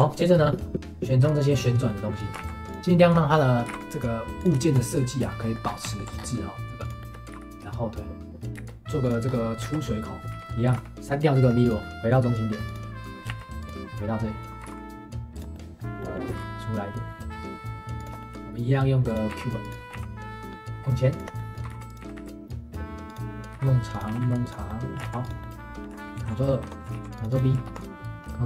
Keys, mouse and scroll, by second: 0.3-0.7 scroll up 1, 0.7 shift+click, 1.9-2.4 middle drag, 2.4 ctrl+s, 2.8 g, 3.0 shift+middle click, 3.6 g, 4.6-5.6 shift+middle drag, 5.6 scroll down 1, 5.9 alt+middle click, 6.1-6.6 scroll up 2, 6.8 shift+click, 7.0 shift+middle click, 7.2 g, 8.5 ctrl+s, 8.6 shift+a, 9.0 click, 9.3-9.6 scroll up 1, 9.6 shift+a, 10.2 scroll up 1, 10.3 shift+d, 10.7 g, 10.9 click, 11.6 click, 11.9 right click, 12.7 click, 13.3 shift+s, 14.6 g, 15.5 middle click, 16.3 g, 18.2 middle click, 18.3-21.6 typing, 21.4 middle click, 24.7 middle click, 25.0 ctrl+s, 25.4-26.1 middle drag, 26.1 ctrl+2, 26.3 middle drag, 26.6 Tab, 26.9 ctrl+r.